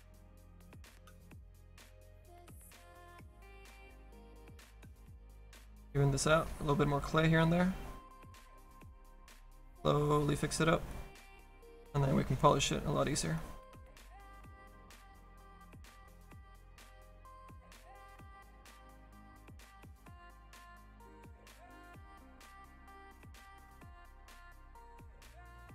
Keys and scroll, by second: 0.6 s, 23.5 s.